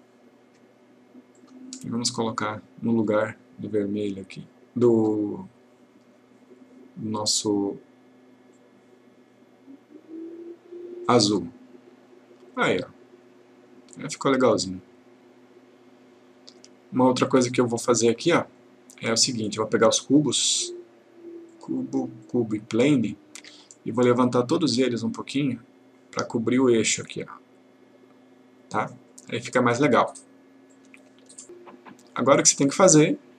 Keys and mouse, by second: 1.5 click, 3.1-5.3 click, 8.6 click, 18.7 click, 21.6 click, 22.4 shift+click, 30.8 click.